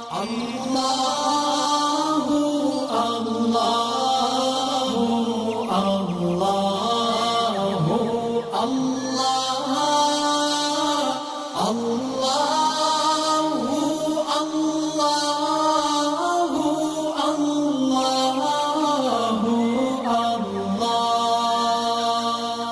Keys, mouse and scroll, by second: 0.1 alt+scroll down 1, 0.3 space, 0.4 click, 1.2-4.1 alt+drag, 4.6 alt+scroll down 1, 5.2 shift+click, 8.9 shift+m, 9.6 alt+scroll up 1, 9.9 alt+click, 14.0 alt+scroll down 1, 14.2 space, 14.3 click, 16.6 alt+scroll up 1, 17.1-20.5 drag.